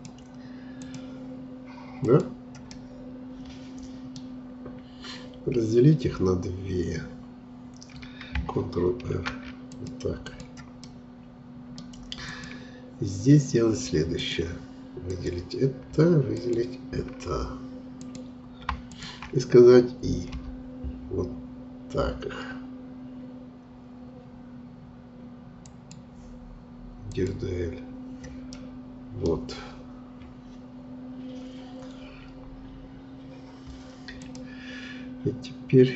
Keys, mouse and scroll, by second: 2.7-5.7 middle drag, 9.0 ctrl+r, 10.8-12.2 middle drag, 12.2-20.2 drag, 20.2 i, 27.0-28.4 drag, 28.4-29.6 middle drag, 29.6-30.6 scroll up 2, 30.6-33.6 scroll down 1, 34.2-35.9 drag.